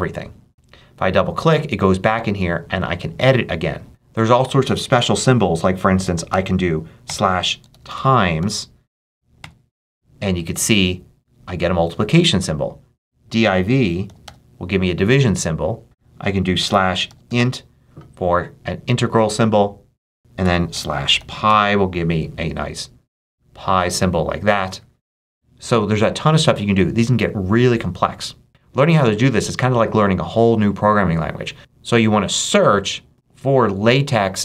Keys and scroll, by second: 6.2-9.3 typing, 13.5-14.6 typing, 16.3-17.7 typing, 20.3-21.8 typing.